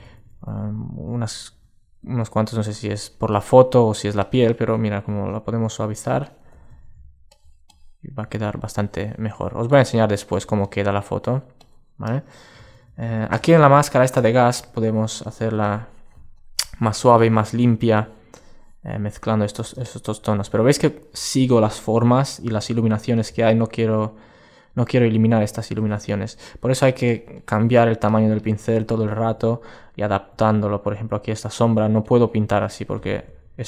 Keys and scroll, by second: 33.1 alt+super+z.